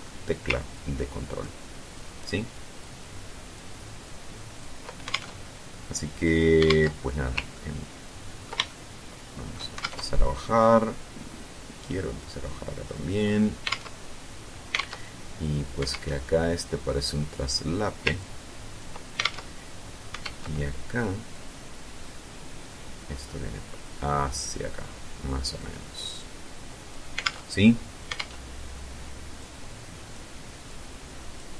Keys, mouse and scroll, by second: 0.5 ctrl+click, 1.7 ctrl+click, 2.5 ctrl+click, 3.8 ctrl+click, 4.8 ctrl+alt+Tab, 6.4 alt+Tab, 7.3-8.3 ctrl+drag, 8.4-9.4 ctrl+shift+drag, 9.6 alt+shift+Tab, 11.0-11.3 scroll down 2, 12.0-12.3 scroll down 2, 12.8 scroll up 2, 13.4 alt+Tab, 14.5 alt+Tab, 15.6 alt+Tab, 16.6 click, 17.9 ctrl+click, 19.0 ctrl+alt+Tab, 19.9 alt+Tab, 21.0-24.4 drag, 25.3-26.8 drag, 26.9 alt+Tab, 27.9 alt+Tab, 29.1-30.1 drag, 30.4 click.